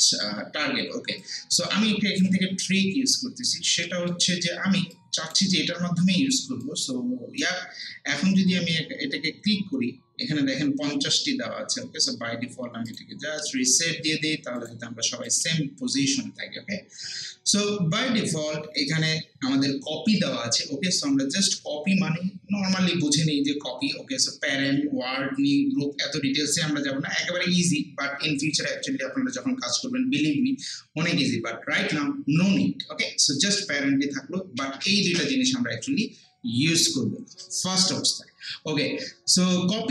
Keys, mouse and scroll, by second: 1.2-3.2 drag, 3.2 scroll up 1, 3.8 alt+middle click, 4.6 scroll down 1, 4.9 alt+click, 6.1 scroll down 1, 6.5 scroll up 1, 6.6-10.0 alt+drag, 12.9 click.